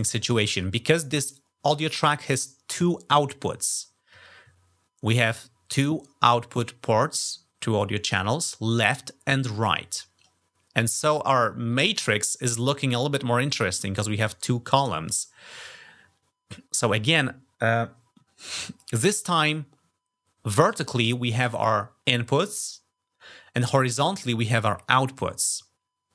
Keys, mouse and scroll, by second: 10.0 click.